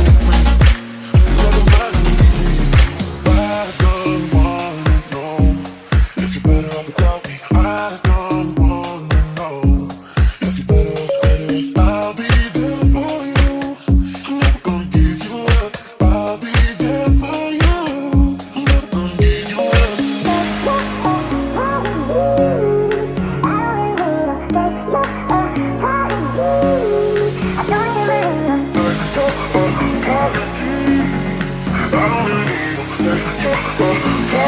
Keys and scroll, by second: 1.9-4.0 typing, 6.4 q, 7.1 5, 7.2 Return, 8.6-13.7 typing, 8.8 Return, 15.5 1, 15.5 Return, 18.3-22.4 typing, 25.6 a, 27.0-27.8 typing, 31.3 Escape, 31.3-33.6 typing.